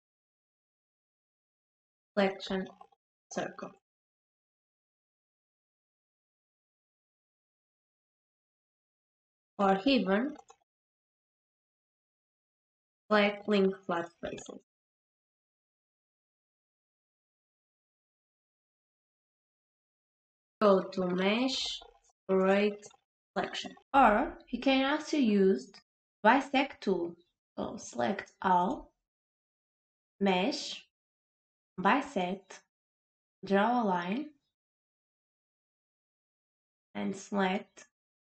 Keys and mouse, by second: 0.5-3.9 drag, 6.6 right click, 7.9-9.0 drag, 10.5-14.1 drag, 14.7 click, 16.5-18.2 drag, 21.4-23.5 drag, 28.0 click, 30.3-35.1 drag, 37.4-38.2 drag.